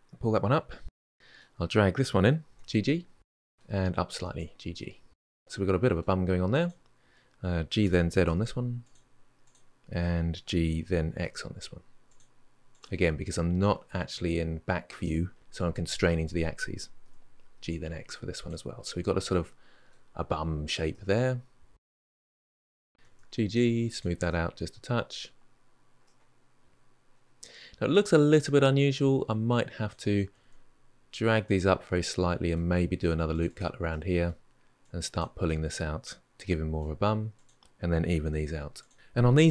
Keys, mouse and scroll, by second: 0.0 ctrl+\, 0.4 ctrl+z, 0.6-0.9 middle drag, 0.9 drag, 1.1-2.3 middle drag, 2.3 g, 3.4 middle click, 4.0 g, 4.5-6.4 middle drag, 6.4 click, 7.6 g, 9.2 click, 10.3 g, 12.5 click, 16.8 g, 18.1-19.4 middle drag, 22.5 click, 22.6 middle click, 22.9 g, 24.0-25.2 middle drag, 25.2-25.8 scroll down 4, 25.8-29.3 middle drag, 29.3 click, 30.0 g, 31.8 middle click, 32.6 ctrl+r, 33.7 middle click, 34.6 click, 35.0 middle click, 35.3 g, 35.8 g, 36.8 middle click, 37.1 click, 37.4 g, 37.7 click, 37.7 g, 38.1-38.5 middle drag, 38.5 click, 38.8 shift+click.